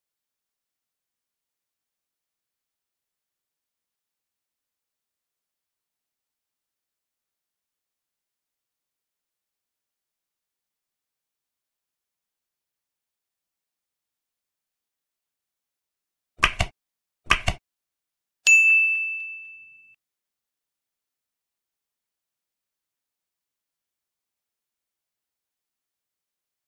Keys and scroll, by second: 1.7 ctrl+s, 3.3 End, 4.1 ctrl+s, 4.3 Down, 4.8 End, 4.9 Down, 6.6 space, 7.2 Left, 9.2 End, 13.1 End, 20.1 Down, 20.2 End, 20.4 Left, 21.2 F7, 21.8 ctrl+x, 21.9 Up, 22.1 End, 22.2 ctrl+v, 22.5 Down, 23.6 Up, 23.9 End, 24.3 Delete, 24.6 Down, 24.7 ctrl+Right, 26.2 space.